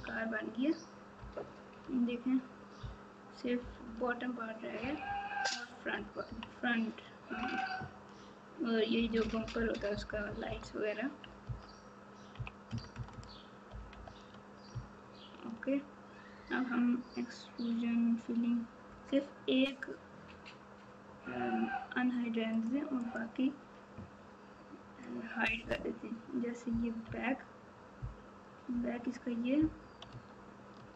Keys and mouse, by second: 1.1 KP_4, 1.6 KP_4, 5.0 KP_6, 5.6 KP_6, 8.9-10.1 KP_4, 10.2 KP_4, 12.3 KP_2, 22.5 click, 23.0 click, 25.6 KP_Divide, 27.0 KP_3, 30.1 Tab.